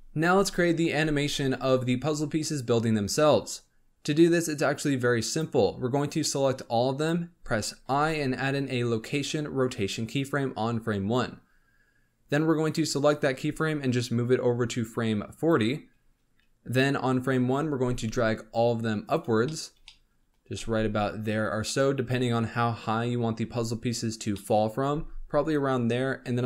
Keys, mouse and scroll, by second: 4.5-6.1 drag, 7.8 i, 13.4 g, 17.4-17.7 scroll down 3, 17.7 g, 19.4-20.5 shift+middle drag, 20.5 g, 24.3-24.8 middle drag, 24.8 g.